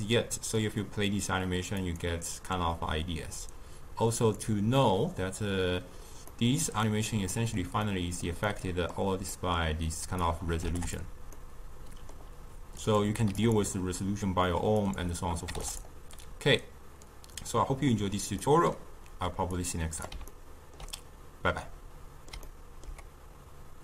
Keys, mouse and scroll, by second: 0.6-6.3 drag, 6.3-10.0 middle drag, 10.0-11.3 drag, 11.3-12.8 middle drag, 12.8 click, 14.8-16.5 drag, 18.5-19.6 middle drag, 19.6 click, 20.3-23.8 ctrl+middle drag.